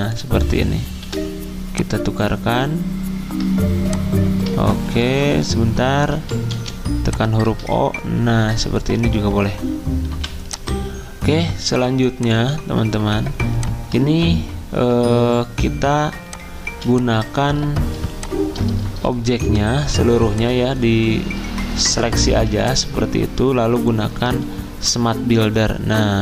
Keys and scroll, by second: 1.0 r, 6.5 o, 10.1 v, 14.0 ctrl+z, 15.5 ctrl+z, 16.7 z, 19.4 v, 22.3 z, 25.1 m.